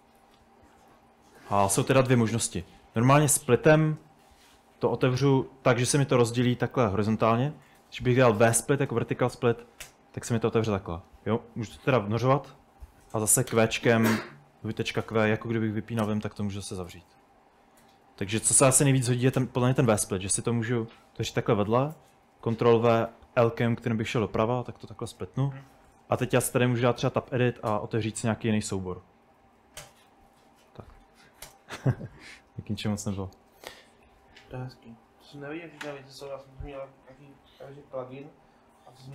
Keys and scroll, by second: 0.0-3.9 typing, 7.6-10.2 typing, 12.1-14.2 typing, 13.5 Return, 16.1 Return, 16.9-19.0 typing, 19.4 Return, 22.0 ctrl+w, 23.1 l, 25.5-31.5 typing, 33.4-34.8 typing, 36.9-39.1 typing.